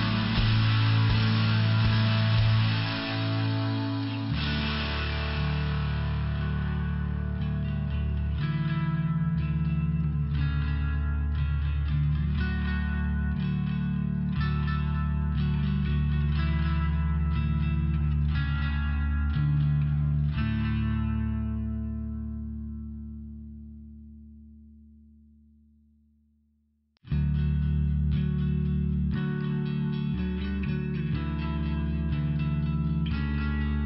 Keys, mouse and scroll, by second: 4.5 click, 11.1 click, 11.6 click, 13.5 click, 14.5 click, 14.8 click, 15.1 click, 17.3 click, 17.4 click, 19.9 click, 20.1 click, 21.5 click, 24.9 click, 26.9 click, 32.4 click.